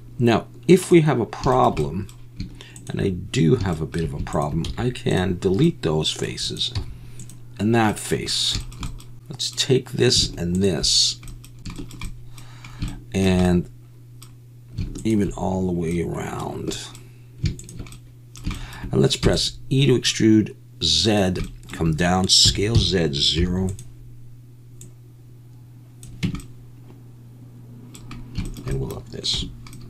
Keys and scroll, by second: 4.6 x, 6.7 x, 9.1 2, 19.2 e, 22.4 s, 22.7 z, 23.4 0, 26.2 Tab, 29.3 /.